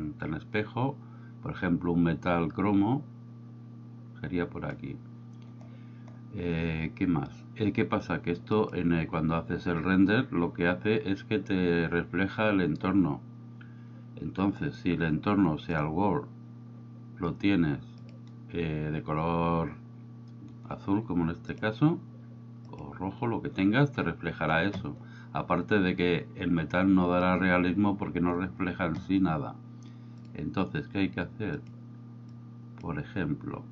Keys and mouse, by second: 8.6 click, 15.7 click, 18.1 click, 21.6 click, 30.3 drag.